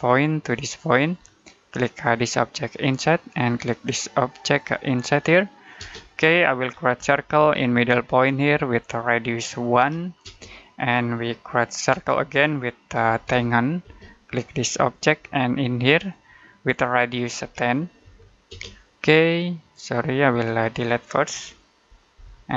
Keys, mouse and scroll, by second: 5.6 space, 6.2 middle click, 6.6 scroll down 1, 6.8 c, 7.2 space, 8.4 click, 9.6-10.1 typing, 12.6-13.7 typing, 14.8 click, 17.3-18.4 typing, 20.1 click, 22.0 Delete.